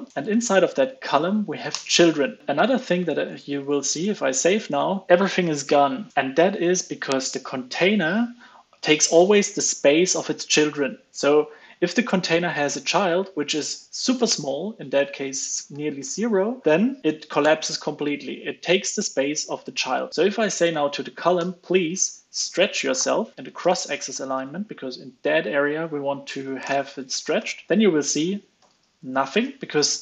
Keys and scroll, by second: 0.1 ctrl+space, 2.6 super+Tab, 3.2 super+Tab, 3.7 super+s, 20.6 super+Right, 23.3 super+z, 23.3 alt+BackSpace, 23.5 alt+BackSpace, 27.7 super+s, 28.5 alt+super+l, 28.7 super+s.